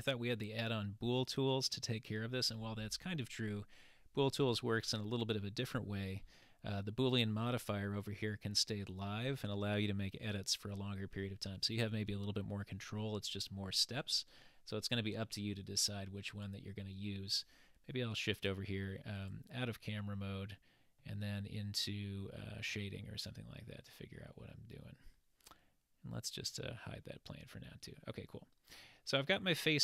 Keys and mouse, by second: 16.4 click, 19.2 click, 20.3-21.2 middle drag, 21.9 middle click, 26.5 click, 27.4-27.9 middle drag, 27.9-29.0 middle drag.